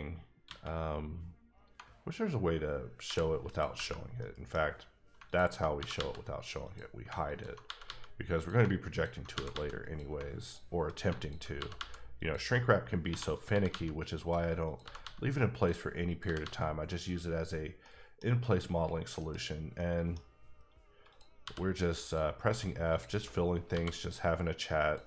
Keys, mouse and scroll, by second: 0.4 a, 3.0 h, 3.5 click, 4.2 middle click, 5.2 alt+click, 5.7 g, 5.9 g, 6.6 click, 7.6 g, 7.8 g, 8.3 click, 9.3 g, 9.5 g, 9.8 click, 11.2 alt+double click, 11.5 g, 11.7 g, 12.2 click, 13.1 1, 13.3 click, 13.5 g, 13.7 g, 14.2 click, 14.6 click, 14.8 g, 15.0 g, 15.5 click, 16.1 click, 16.2 g, 16.4 g, 16.9 click, 17.5 scroll down 2, 17.8 middle click, 18.4 middle click, 19.4 scroll up 1, 19.7 middle click, 21.1 click, 21.4 f, 22.0 click, 22.9 click, 23.7 f, 24.8 click.